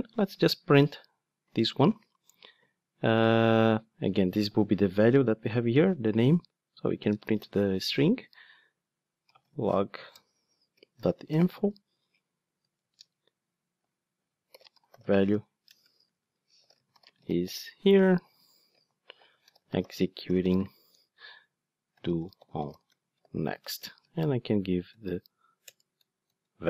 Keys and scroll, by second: 0.1 ctrl+Tab, 10.1 Return, 25.6 Return.